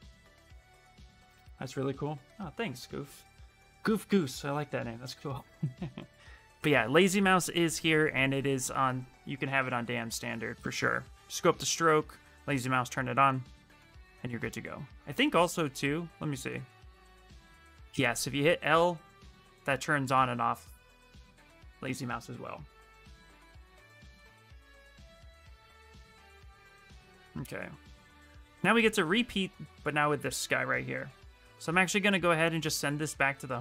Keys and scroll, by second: 8.9-10.1 typing, 17.2-18.9 typing, 21.1 l, 31.3 w.